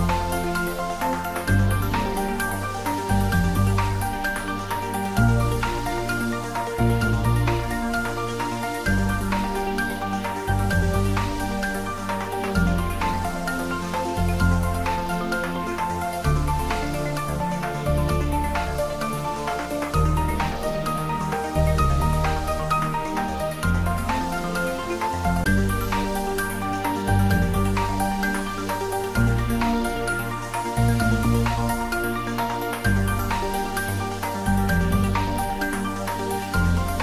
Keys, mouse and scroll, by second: 2.8 scroll down 1, 5.6 click, 14.2 scroll up 1, 15.7-19.3 drag, 23.5 click, 26.6 click, 30.6 click, 32.2 scroll down 1, 33.0-37.0 middle drag.